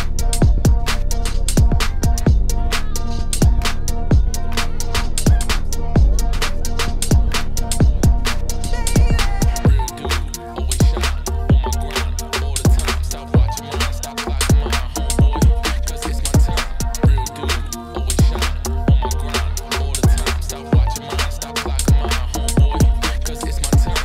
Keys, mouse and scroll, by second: 0.3 a, 1.4 Tab, 1.6-2.8 middle drag, 3.4 Tab, 3.6 a, 3.9-5.3 middle drag, 5.3 KP_Divide, 5.6 middle click, 5.9 3, 6.5 alt+click, 6.6 middle click, 7.3-9.0 drag, 9.0 middle click, 9.5 typing, 9.9 click, 10.6 typing, 14.7-15.2 scroll down 1, 15.2 ctrl+s, 15.2 KP_Divide, 15.5 middle click, 16.1-17.8 scroll down 1, 17.8-18.1 scroll down 1, 18.1 click, 18.2 Tab, 18.4 middle click, 18.8-19.1 scroll up 1, 19.1-20.1 scroll down 1, 20.1 scroll down 1, 20.2 a, 23.2 click, 23.5 middle click, 23.7 Tab.